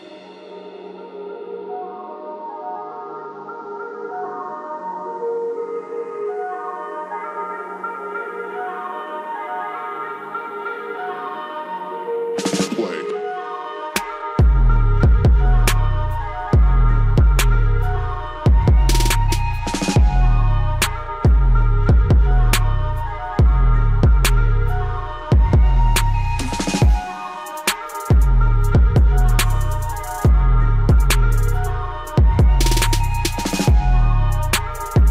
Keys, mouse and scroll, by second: 1.7 click, 6.2 click, 6.4-8.3 drag, 13.3-20.7 drag, 21.2 click, 24.3 click, 28.9-34.6 drag, 34.6 right click.